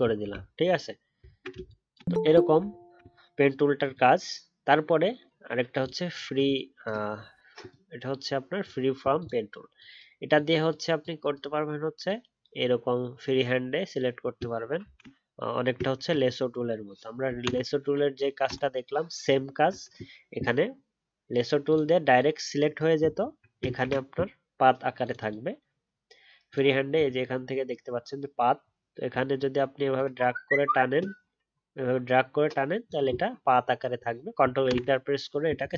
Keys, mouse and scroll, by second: 0.3 alt+scroll down 1, 0.5-1.2 alt+scroll up 1, 2.7-5.8 alt+scroll up 1, 23.2 alt+scroll up 1, 23.9 ctrl+d, 29.1-33.4 alt+scroll down 1, 33.4 alt+scroll up 1, 34.6 ctrl+Return.